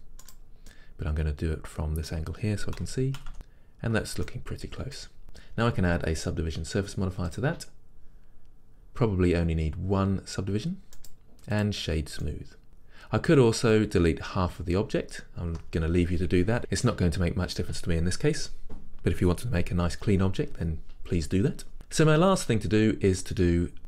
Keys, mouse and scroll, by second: 0.4 right click, 0.8-2.9 middle drag, 2.9 s, 3.3-7.5 middle drag, 4.6-5.0 scroll up 2, 7.5-11.7 drag, 11.7 right click, 12.3-23.8 middle drag, 12.7 Tab, 12.8-14.3 scroll up 2, 14.3-15.6 scroll up 1, 15.6 Tab, 17.5-18.0 scroll down 2, 19.4-23.8 scroll down 2.